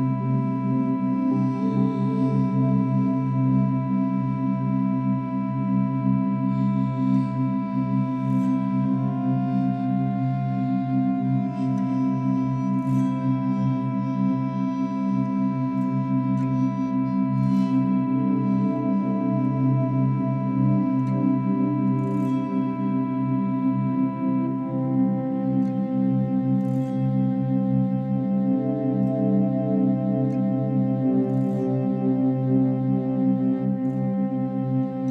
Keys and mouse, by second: 0.0 Escape, 0.6-1.6 alt+drag, 3.1-3.5 alt+shift+drag, 3.7 alt+shift+drag, 4.1-4.9 alt+drag, 5.2-7.3 drag, 7.6 click, 7.7-8.5 drag, 8.6-9.0 drag, 9.1-9.7 alt+drag, 9.8 click, 10.5-11.2 drag, 11.4 r, 11.7 y, 12.6-13.7 drag, 14.7-16.1 alt+drag, 17.3 click, 19.7 click, 20.8-22.6 alt+drag, 25.4-26.2 alt+drag, 26.8-27.9 alt+drag, 28.4 click, 29.3-30.8 shift+drag, 31.1 shift+click.